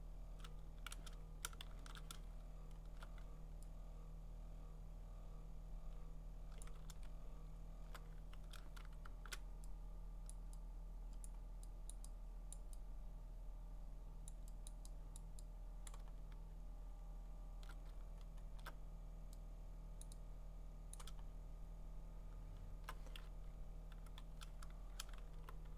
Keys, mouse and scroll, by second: 1.7 ctrl+shift+z, 2.5 scroll, 6.6 click, 6.9 ctrl+z, 7.6 scroll, 8.8 !, 10.3 click, 11.2 click, 12.0 click, 12.5 click, 14.3 click, 14.7 click, 15.2 click, 15.9 click, 16.1 scroll, 16.4-17.9 scroll down 13, 17.9-18.5 scroll up 10, 20.0 click, 20.9 click, 21.2-21.6 scroll down 4, 21.6-22.4 scroll, 22.4-23.2 scroll, 23.2-24.0 typing, 25.3-25.7 typing.